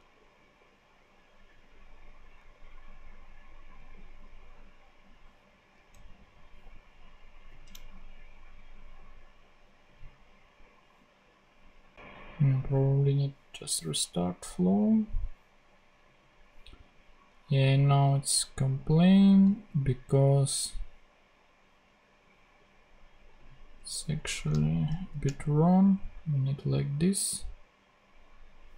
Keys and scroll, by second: 23.7 BackSpace, 24.1 Right, 24.9 shift+/.